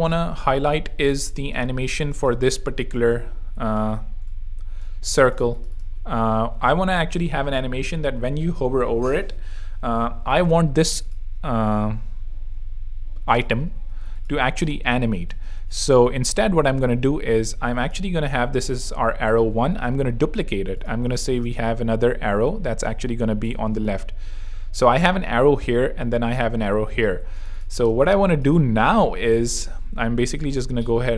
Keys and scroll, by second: 0.7 space, 1.7 v, 3.5 z, 4.0 alt+z, 5.0 alt+space, 5.4 z, 13.7 super+x, 14.0 alt+super+z, 14.6 alt+space, 15.1 space, 17.7 super+z, 18.3 super+z, 18.8 super+Escape, 19.5 Escape, 19.7 super+d, 20.6 super+z, 21.4 space, 27.2 z, 27.9 space.